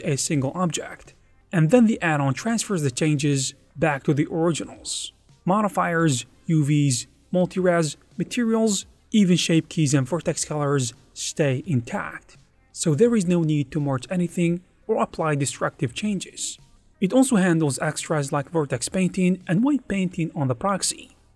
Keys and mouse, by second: 0.4 click, 1.4 ctrl+Tab, 1.8-3.2 drag, 3.6 click, 4.4 ctrl+z, 4.5-5.1 ctrl+z, 5.3 ctrl+Tab, 6.1 click, 7.7 click, 8.3 ctrl+Tab, 8.8 5, 9.0 f, 9.9 click, 11.2 shift+2, 11.5 f, 13.5 click, 15.2 click, 15.6 ctrl+Tab, 16.0 click, 17.0 alt+3, 17.1 click, 18.1 ctrl+Tab, 18.5-19.9 drag, 20.3 click, 21.2 ctrl+z, 21.3 ctrl+z.